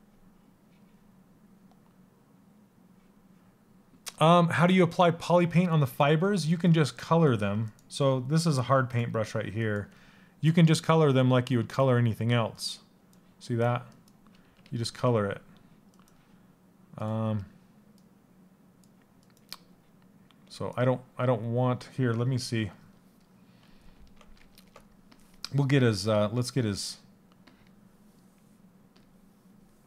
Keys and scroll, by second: 14.2 ctrl+z.